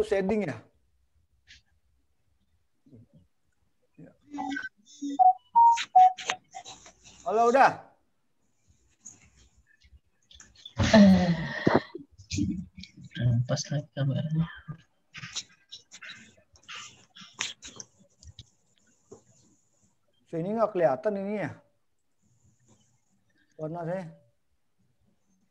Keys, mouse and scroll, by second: 5.4 click, 13.3 click, 14.8 click, 17.5 click, 18.3 click, 23.1 click.